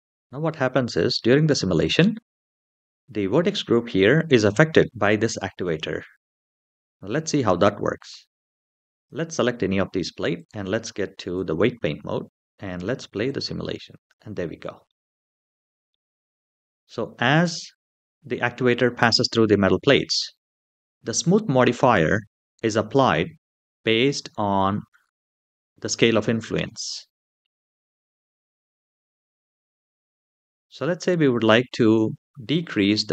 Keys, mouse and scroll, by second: 8.7 click, 10.1-11.3 drag, 13.0 click, 13.7 space, 14.6-15.7 middle drag, 29.9 middle click.